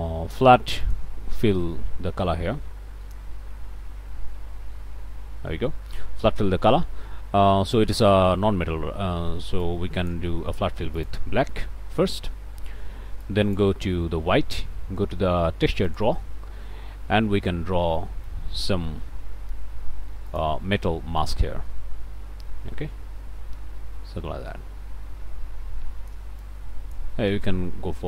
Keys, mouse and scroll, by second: 3.7 ctrl+space, 4.9 ctrl+space, 9.6 click, 10.9 click, 13.2 click, 15.9 click, 16.6 middle click, 18.0 shift+click, 18.9 f, 20.3 click, 26.3 click, 27.1-28.0 drag.